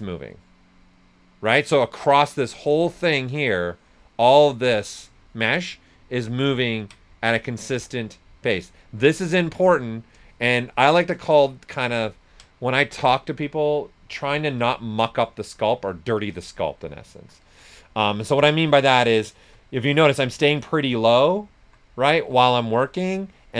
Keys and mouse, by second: 1.5 right click, 2.8-5.2 shift+drag, 5.2 ctrl+right click, 6.6 ctrl+click, 9.0 s, 9.1 click, 10.2-12.1 shift+drag, 13.0 ctrl+right click, 14.0-15.4 typing, 15.5 click, 16.1-17.4 alt+drag, 17.4 s, 17.5 click, 18.7 right click, 20.1 click, 21.5 alt+right click, 22.1 s, 22.2 click.